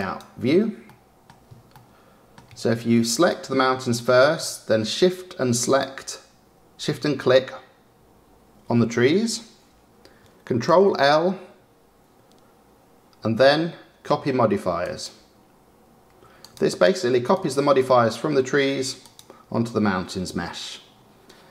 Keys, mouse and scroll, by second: 0.0 click, 1.1-3.3 middle drag, 3.3 click, 5.8 shift+click, 16.6 click, 17.5 click, 19.2 click.